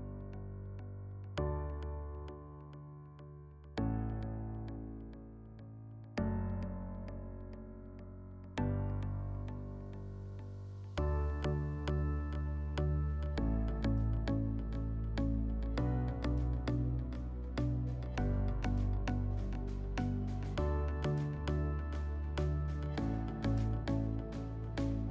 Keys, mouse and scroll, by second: 2.8-4.3 drag, 5.7 click, 6.8 click, 9.0 click, 11.1 click, 12.5 click, 14.3 click, 17.4 click, 20.5 click, 22.5 click, 23.4 click.